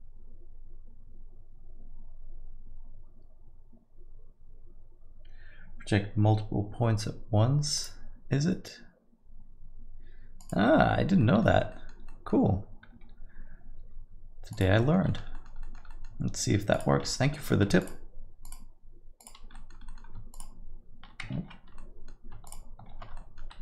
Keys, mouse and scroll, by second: 7.7 click, 11.2 middle click, 11.7 alt+middle click, 12.1 middle click, 13.8 g, 14.9 alt+middle click, 15.3 alt+middle click, 15.6 alt+middle click, 15.9 middle click, 16.7 click, 17.0 shift+z, 17.3 alt+middle click, 17.8 shift+click, 18.4 click, 19.2 click, 19.5 middle click, 19.8 alt+middle click, 20.3 shift+click, 21.4 ctrl+z, 21.7 alt+middle click, 22.4 shift+click, 22.9 ctrl+z, 23.1 alt+middle click.